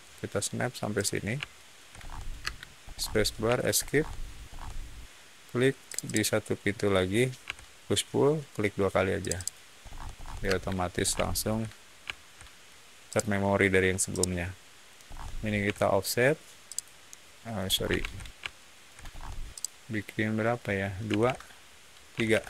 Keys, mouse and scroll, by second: 0.9 shift+click, 1.4 shift+middle click, 1.8 scroll up 1, 2.3 space, 2.8 scroll up 1, 3.4 Escape, 3.7 scroll up 1, 4.4 scroll up 1, 5.8 click, 6.0 click, 7.4 p, 9.1 click, 9.3 click, 9.7-10.2 scroll down 2, 10.4 space, 10.8 scroll down 1, 11.2-12.5 shift+middle drag, 13.0 shift+click, 14.0-14.9 shift+middle drag, 15.0 shift+middle click, 15.5 f, 16.6 click, 17.6 scroll up 1, 17.9 ctrl+z, 18.4-18.7 shift+middle drag, 18.9-19.4 scroll up 1, 19.4 shift+click, 21.0 2, 21.1 Return, 22.1 3, 22.2 Return.